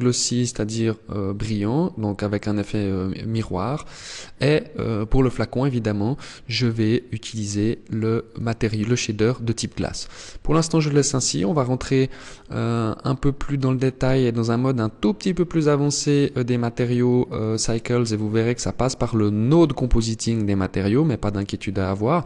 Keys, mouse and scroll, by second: 6.3 click.